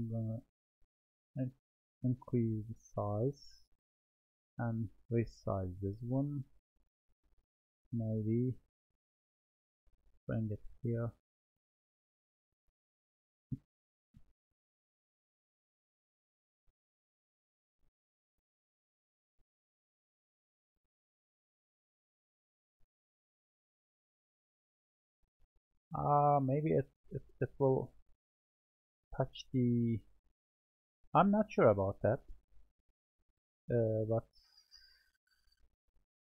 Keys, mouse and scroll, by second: 1.2 s, 5.3-6.5 drag, 7.4-8.5 middle drag, 8.8-11.2 middle drag, 11.2-12.7 drag, 17.3 click, 18.6 click, 20.0-23.8 middle drag, 23.8 click, 25.2-26.6 middle drag, 27.5-28.9 middle drag, 29.3-30.8 middle drag, 32.3-36.3 shift+middle drag.